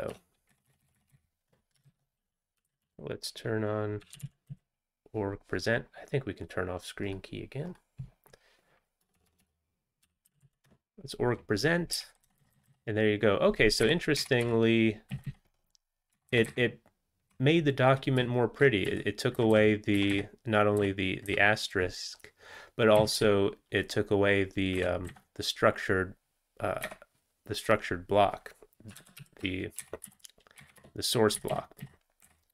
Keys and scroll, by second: 0.2 BackSpace, 0.5 Up, 0.7 Up, 0.9 Up, 1.0 Up, 1.3 Up, 1.8 alt+x, 3.0-5.0 typing.